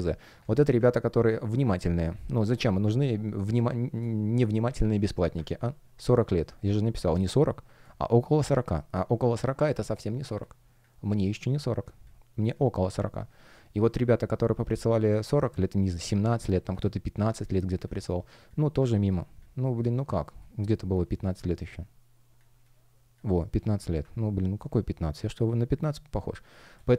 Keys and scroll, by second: 2.2 space, 7.8 space, 26.7 space.